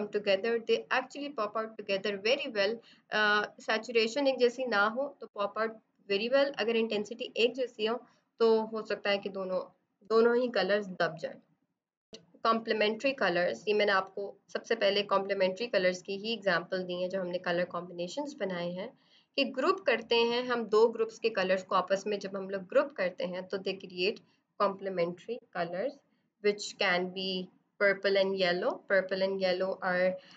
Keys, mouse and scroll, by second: 2.2 z, 2.3 click, 2.6 space, 2.7 click, 2.8 space, 2.9 b, 3.0 right click, 3.3 click, 7.8 ctrl+-, 7.8 typing, 8.1 click, 12.0 click, 25.5 ctrl+=, 29.3 b.